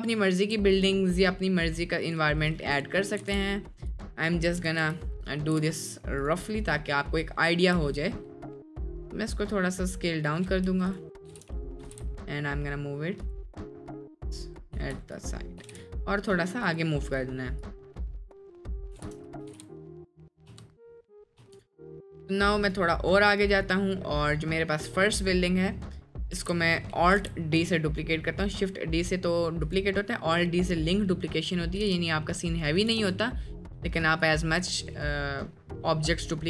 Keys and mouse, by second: 3.2 g, 4.6 KP_Enter, 5.2 KP_Decimal, 5.5 g, 6.6 middle drag, 7.1 middle drag, 7.7 s, 10.7 s, 11.3 g, 11.9 g, 13.6 middle click, 14.3-14.7 middle drag, 14.8 g, 15.4 middle click, 15.6 g, 17.1 drag, 17.6 click, 18.7 click, 18.9 g, 19.4 g, 20.4 click, 20.5 space, 22.3-23.4 drag, 22.3 space, 24.0 middle click, 25.2 click, 26.4 alt+d, 27.2 g, 30.0 drag, 30.1 middle click, 30.6 middle click, 31.1 middle click, 31.8 g, 32.9 g, 34.9 middle click, 35.6 middle drag.